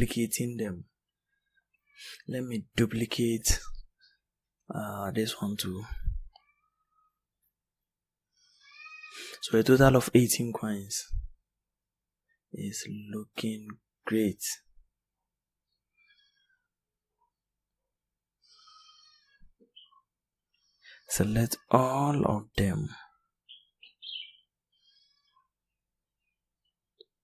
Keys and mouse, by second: 17.6 b, 18.3 b, 20.8 b, 21.7 b, 22.6 b, 23.6 b, 23.9 b, 24.4 b.